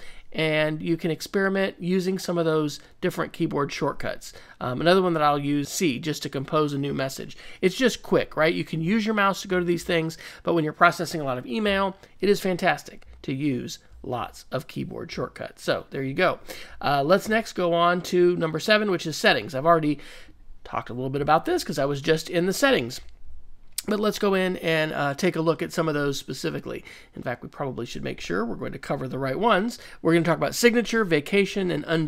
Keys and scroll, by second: 5.6 c.